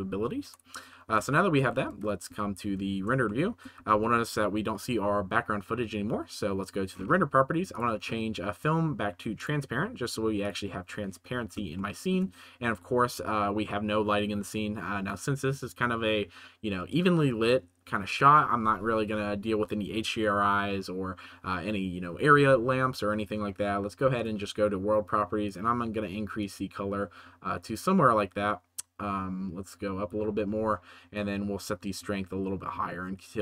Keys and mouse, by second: 1.3 shift+middle click, 1.9 ctrl+s, 2.2 z, 3.2-3.6 shift+middle drag, 3.9 ctrl+s, 7.7 middle click, 10.4 middle click, 11.9 shift+middle click, 24.1 right click, 25.4 right click, 31.2-33.4 right drag.